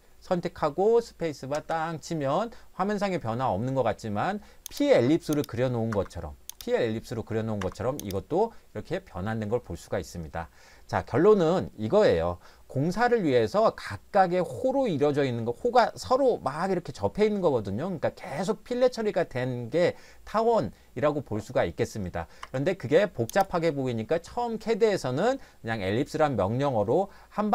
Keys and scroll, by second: 1.6 space, 5.9 Escape, 7.6 Escape, 22.4 Escape.